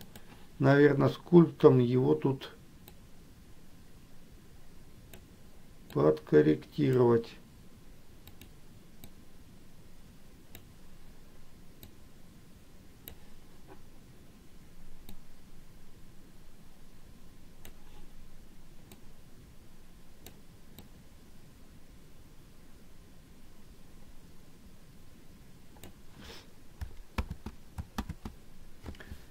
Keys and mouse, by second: 3.1-5.5 drag, 6.3 click, 9.3-10.9 drag, 12.1-13.4 drag, 15.4-18.1 drag, 19.2-20.5 drag, 21.1-26.0 drag.